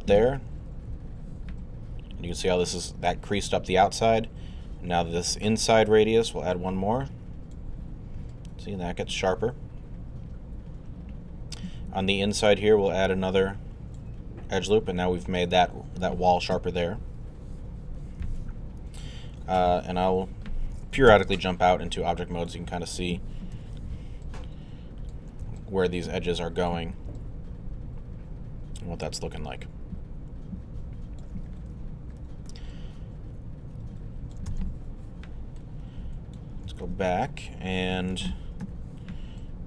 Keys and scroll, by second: 0.9 2, 16.5 2, 17.0 3, 21.1 q, 23.5 1, 38.6 alt+3.